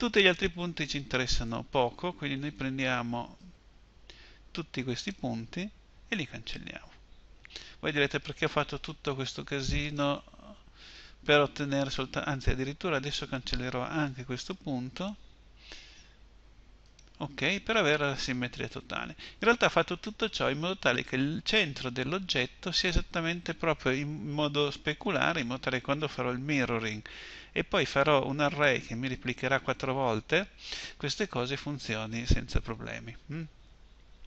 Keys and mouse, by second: 1.1 a, 2.1 b, 7.0 Delete, 13.7 b, 15.5 Delete.